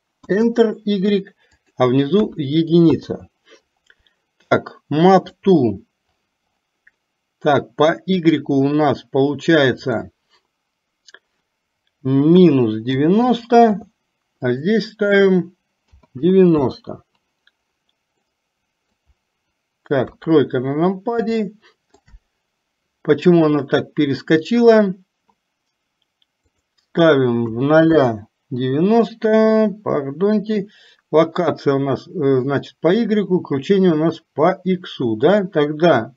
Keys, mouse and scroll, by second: 1.6-3.0 drag, 10.0-13.8 drag, 14.6-16.7 drag, 18.3 middle click, 20.1 KP_3, 21.5 shift+middle click, 26.8-28.1 drag, 35.5-36.1 drag.